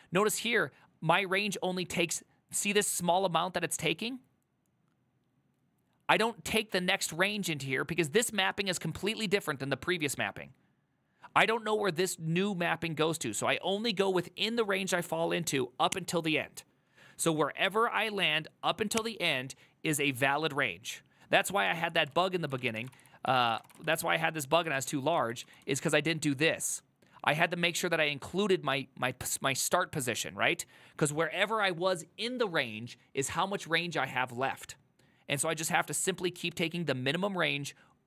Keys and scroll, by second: 22.3 alt+{, 22.7 ctrl+a, 22.9-24.2 typing, 23.0 ctrl+c, 23.1 ctrl+c, 23.3 ctrl+c, 24.8 ctrl+u, 25.3-26.0 typing.